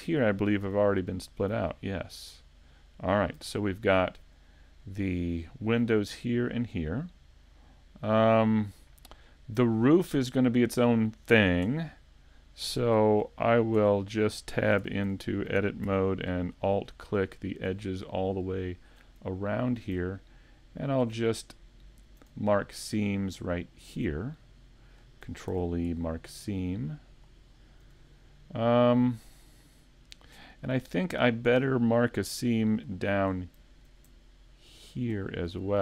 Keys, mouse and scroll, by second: 0.0 scroll down 1, 0.6 z, 2.4 middle click, 3.4 a, 4.5 right click, 7.5 middle click, 11.7 Tab, 12.0 scroll down 2, 12.8 Tab, 13.1 right click, 13.8 Tab, 14.1 scroll up 1, 14.8 ctrl+Tab, 14.8 scroll up 1, 16.4 alt+right click, 16.9 scroll down 1, 17.3 middle click, 18.6 alt+shift+right click, 19.2 middle click, 20.9 alt+shift+right click, 21.3 middle click, 22.6 alt+shift+middle click, 23.8 alt+shift+right click, 24.3 middle click, 25.5 ctrl+e, 27.8 a, 28.4 middle click, 30.7 shift+middle click, 32.3 middle click, 32.9 shift+middle click, 33.4 middle click, 34.9 alt+right click, 35.7 alt+shift+right click.